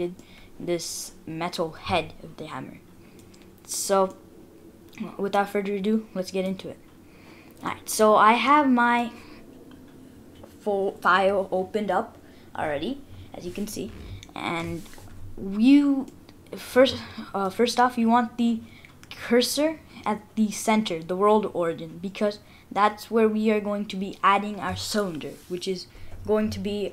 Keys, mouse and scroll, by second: 0.2 middle click, 3.5-3.9 scroll up 3, 4.1 middle click, 7.3-7.7 scroll down 1, 7.7 middle click, 9.4-10.1 scroll down 3, 15.0-15.9 scroll up 5, 16.1 middle click, 17.3 middle click.